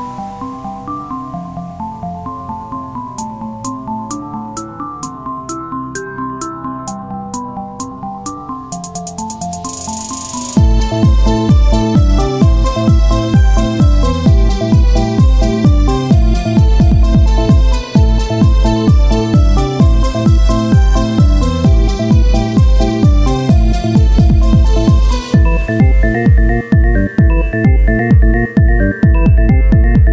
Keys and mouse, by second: 0.6 x, 2.2 ctrl+Tab, 2.9-4.0 drag, 4.0 f, 5.0 w, 7.9-9.0 ctrl+z, 7.9 w, 10.8 ctrl+z, 12.5 i, 15.6 w, 19.0 w, 21.2 ctrl+z, 22.2 x, 24.0-25.3 drag, 25.3 ctrl+Tab, 28.2 ctrl+Tab, 29.0 z.